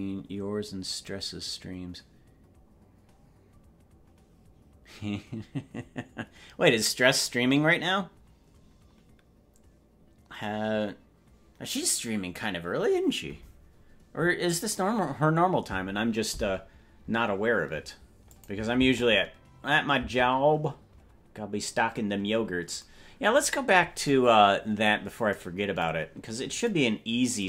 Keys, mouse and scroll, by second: 18.3 click, 18.8 space, 20.0 space, 22.0-22.6 scroll down 7.